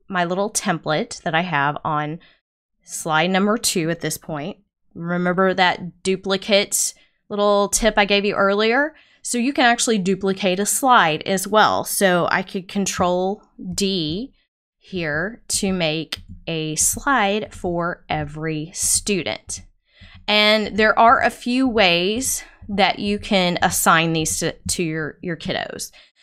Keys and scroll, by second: 13.7 super+d, 14.9 super+d.